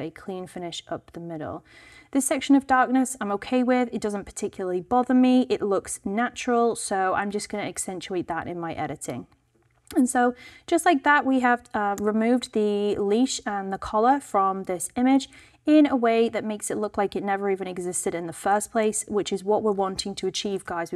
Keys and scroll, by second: 12.0 v, 20.4 alt+super+0.